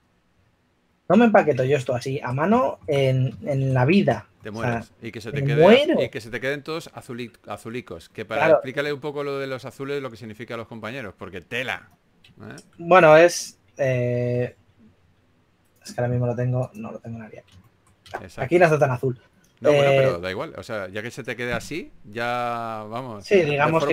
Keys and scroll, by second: 1.2 typing, 14.1-15.0 typing, 22.3 typing.